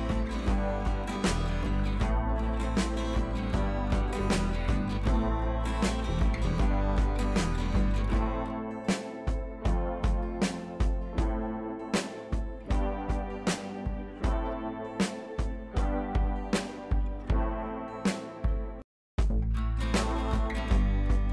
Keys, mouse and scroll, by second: 0.0 click, 0.0-1.2 drag, 3.6 ctrl+v, 4.4 click, 11.5 click, 13.4 click, 17.2 click, 18.6 click, 19.1-20.2 scroll down 1.